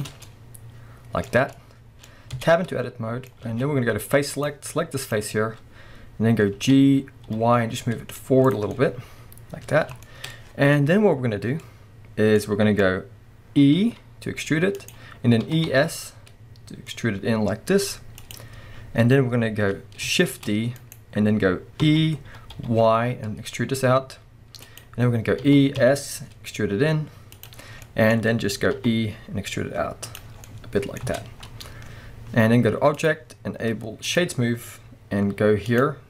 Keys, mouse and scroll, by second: 0.0 shift+click, 0.1 scroll down 1, 0.3-4.4 middle drag, 1.3 scroll up 2, 2.1-2.4 scroll up 2, 2.4 Tab, 3.5 alt+a, 4.4 click, 5.0 click, 6.5 g, 8.5 click, 8.7 scroll down 1, 8.8-14.9 middle drag, 11.6-12.4 scroll up 2, 13.7 e, 14.9-15.5 drag, 15.5 e, 18.3 click, 18.6-19.9 scroll up 1, 20.3 shift+d, 21.0 right click, 21.8 e, 24.8 click, 25.4 e, 27.5 click, 27.6 scroll down 1, 27.8-30.2 middle drag, 28.1-28.8 scroll down 1, 28.8 e, 30.2 click, 30.4 scroll down 1, 30.5-33.0 middle drag, 31.0 Tab, 31.4-33.0 scroll up 1, 33.0-35.8 drag.